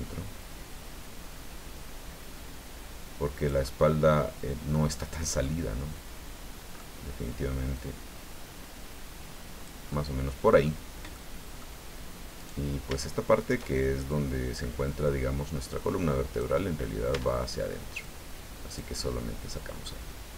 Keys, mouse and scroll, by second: 3.6-4.9 right drag, 5.4-6.9 middle drag, 7.7-9.8 drag, 9.9 middle click, 11.1 middle click, 12.4 right click, 13.4 shift+right click, 14.1-16.6 drag, 17.1 Tab, 18.0-20.0 drag.